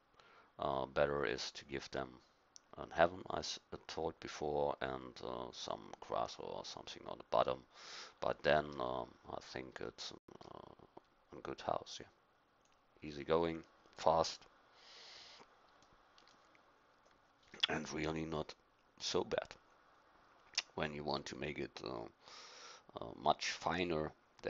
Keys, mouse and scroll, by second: 11.3-13.2 drag, 13.8-15.2 drag, 15.2-19.8 middle drag, 21.6-23.0 drag, 23.0-24.4 middle drag.